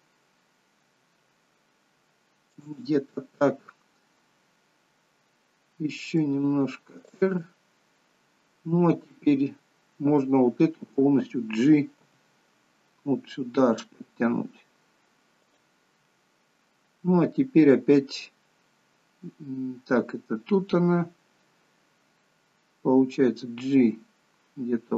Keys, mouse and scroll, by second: 6.3 r, 12.1 g, 23.4 g.